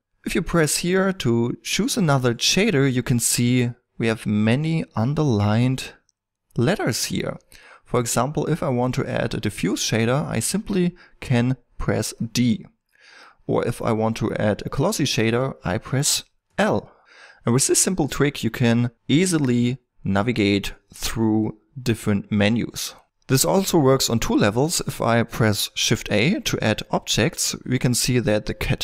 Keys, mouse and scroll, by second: 26.7 shift+a.